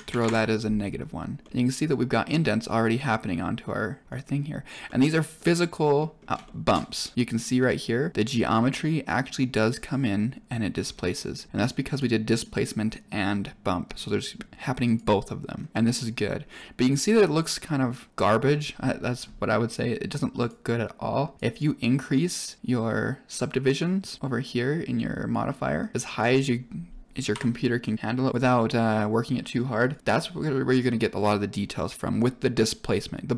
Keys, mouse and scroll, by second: 1.3 middle click, 1.7 scroll up 3, 2.2 middle click, 2.6-3.0 scroll down 3, 3.0 click, 3.0 middle drag, 3.2 drag, 4.2 middle click, 4.8-5.9 middle drag, 6.2 scroll up 5, 6.4 shift+middle drag, 7.0 scroll up 1, 8.1 click, 10.7-11.1 scroll down 5, 11.8-13.7 drag, 14.7 click, 15.5 scroll down 2, 15.7 shift+middle click, 20.3 click, 21.3 click, 22.6 click, 23.5 click, 25.7 click, 26.0-28.3 drag, 29.8-32.6 drag.